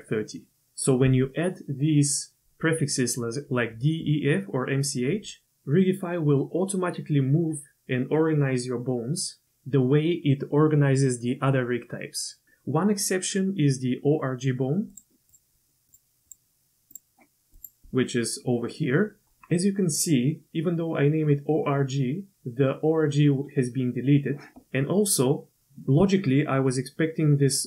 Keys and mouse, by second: 15.3 click, 15.9 click, 16.2 click, 16.9 click.